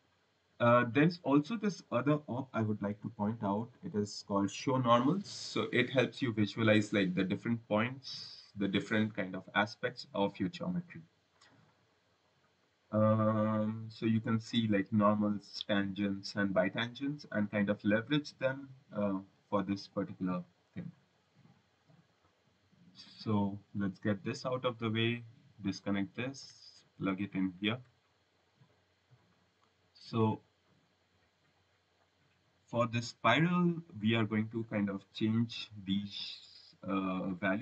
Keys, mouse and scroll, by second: 1.4 click, 2.4-4.9 typing, 5.7 click, 7.6 click, 9.4 click, 13.1-13.6 scroll, 14.9 click, 16.0 click, 20.2 click, 22.0 click, 23.7 Delete, 24.9 right click, 25.8 click, 27.3 click, 29.3 click, 30.1 click, 34.9-35.6 scroll, 36.5-37.1 scroll.